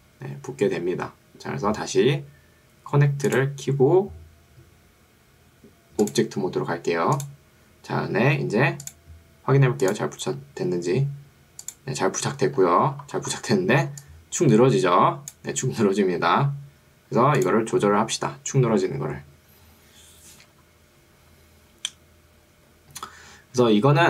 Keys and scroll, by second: 13.9 1.